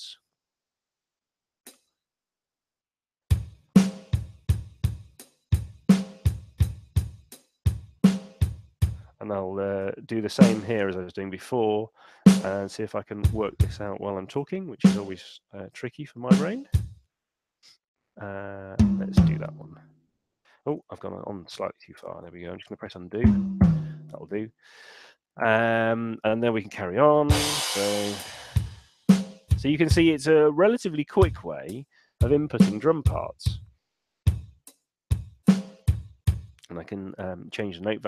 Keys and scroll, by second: 9.8 /, 14.5 /, 20.9 super+z, 37.1 4.